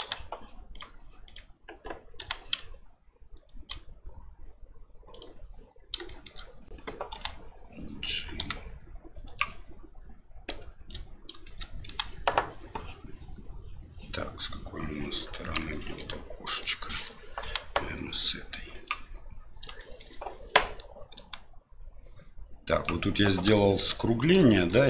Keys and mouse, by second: 0.0 g, 1.2 right click, 2.2 g, 6.1 shift+middle click, 7.1 g, 11.4 shift+middle click, 11.8 g, 15.8 shift+middle click, 16.7 shift+middle click, 17.4 g, 19.9 middle click, 21.1 g, 23.6 middle drag, 24.6 shift+middle click.